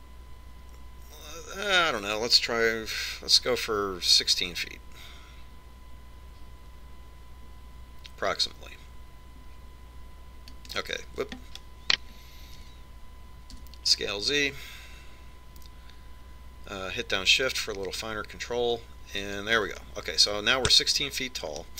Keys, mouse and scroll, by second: 13.9 s.